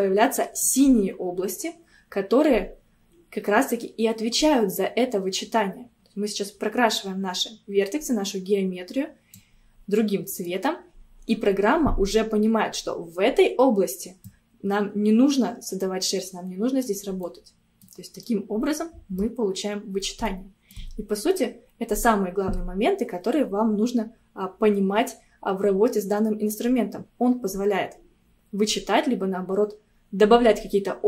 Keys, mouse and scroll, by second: 0.7-3.7 drag, 9.7 scroll down 2, 10.0-13.2 middle drag, 13.2-14.3 scroll up 1, 14.3-17.3 drag, 17.3-23.4 middle drag.